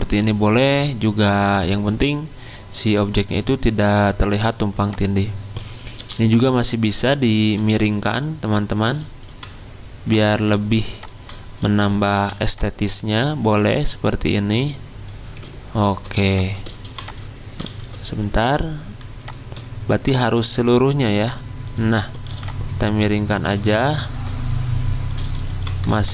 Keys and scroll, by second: 5.9 r, 7.6 ctrl+z, 9.2 v, 12.1 v, 14.2 r, 16.8 v, 17.6 ctrl+z, 22.2 r, 23.6 ctrl+z, 25.5 v.